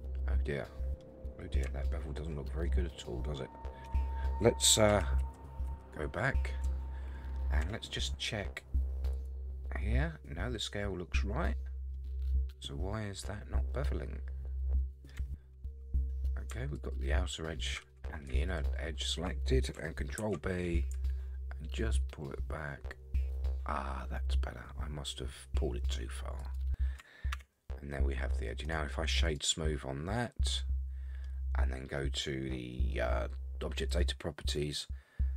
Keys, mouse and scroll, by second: 1.2-1.6 scroll up 4, 1.8-2.3 shift+middle drag, 2.7-3.6 middle drag, 3.9 Tab, 4.9 ctrl+z, 5.2 ctrl+z, 5.7 ctrl+z, 7.6 Tab, 9.1 click, 11.9-15.1 middle drag, 15.2 Tab, 16.7 alt+click, 18.5 alt+shift+click, 20.2 ctrl+b, 27.3 Tab, 27.9-28.5 middle drag, 28.6-29.4 right drag, 29.8-30.2 scroll down 2, 30.2-31.2 middle drag, 33.9 click.